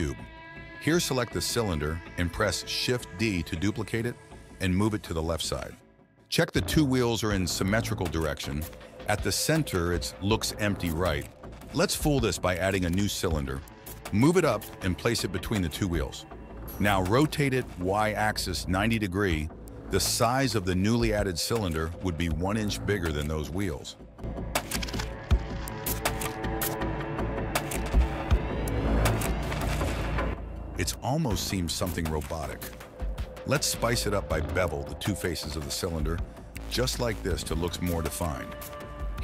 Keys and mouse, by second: 0.2 KP_7, 0.9 shift+d, 4.6 click, 5.0 g, 7.5 click, 10.5 KP_3, 12.0 shift+a, 13.3 r, 14.6 g, 16.0 s, 17.2 r, 21.3 s, 23.6 s, 25.5 KP_3, 25.6 KP_1, 25.9 g, 27.0 g, 28.2 click, 28.8 s, 29.3 click, 30.1 click, 30.3 ctrl+a, 30.9 Tab, 31.6 click, 32.0 alt+click, 32.6 alt+shift+click, 33.2 ctrl+b, 36.1 Tab, 36.7 click.